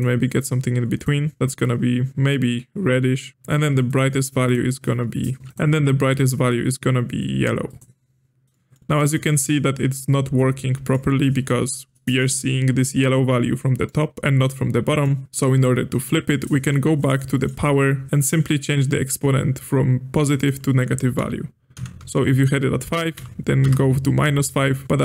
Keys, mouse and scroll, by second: 3.3-4.5 drag, 5.5 ctrl+z, 5.5 click, 8.5-8.8 middle drag, 8.8-9.1 scroll down 2, 9.1-16.9 middle drag, 16.9-17.2 scroll up 1, 17.2 middle click, 17.7-19.1 scroll up 4, 20.3-23.5 drag, 24.8 ctrl+z.